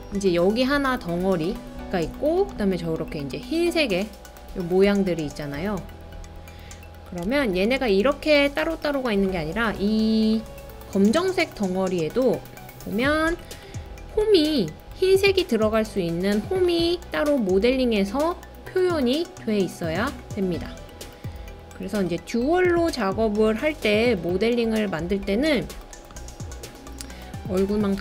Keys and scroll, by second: 7.3 super+z, 27.7 super+c.